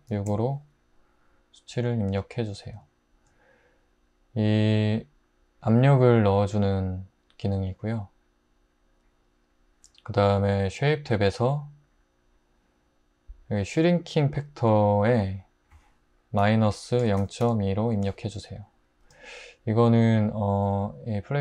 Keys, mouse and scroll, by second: 0.0-0.3 typing, 16.4-17.4 typing, 17.9 Return.